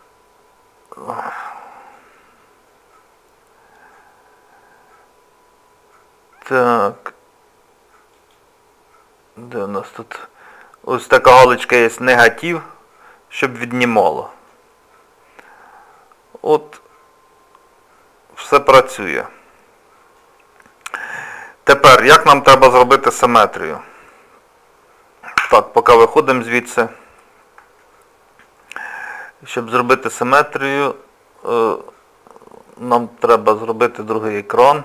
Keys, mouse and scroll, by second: 8.2 click, 8.8-11.3 scroll down 3, 12.3 click, 14.5 middle click, 20.7 middle click, 23.0 click, 25.4 Tab, 26.1 middle click, 27.8 shift+middle click, 28.9 middle click, 30.3 scroll up 1, 30.4-30.9 scroll down 1, 33.6 click.